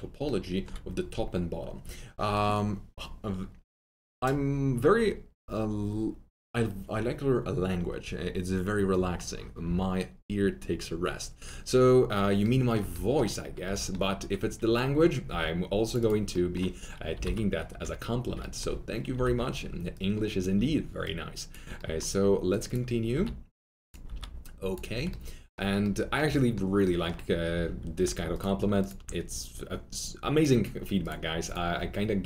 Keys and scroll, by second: 15.2 2, 17.1 alt+t, 17.2 alt+z, 17.7 F3, 19.1 r, 20.2-21.0 typing, 23.1 r, 24.0 w, 27.5 alt+2.